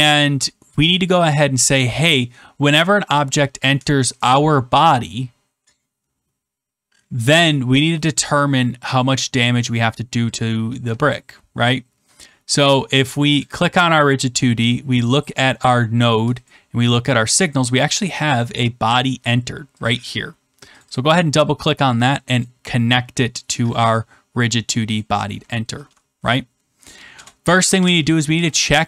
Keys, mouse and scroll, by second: 13.4-14.6 drag, 15.1-16.4 drag, 19.8 click, 20.7 click, 22.4 click, 24.9 click, 27.0 Return, 27.7-28.3 typing.